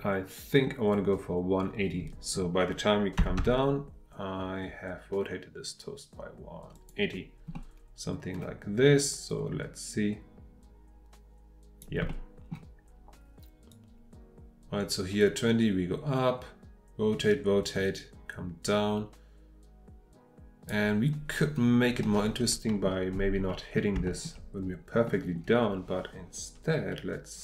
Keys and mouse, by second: 6.7 click, 7.5-7.9 middle drag, 7.9 click, 8.2 middle click, 9.3-11.8 drag, 12.1-12.5 middle drag, 13.7-18.3 drag, 22.0-22.9 middle drag, 23.5 middle click, 24.0-24.3 shift+middle drag, 25.0 middle click.